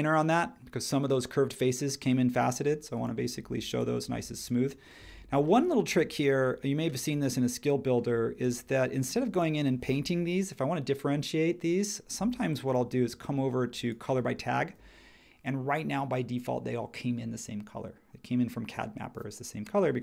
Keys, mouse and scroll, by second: 9.2 space.